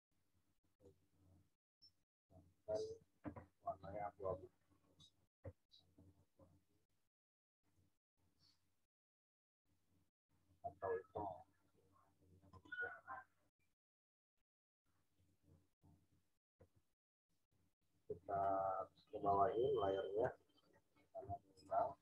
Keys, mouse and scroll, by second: 12.5 click, 15.1 click, 21.2 z, 21.5 click, 21.9 v.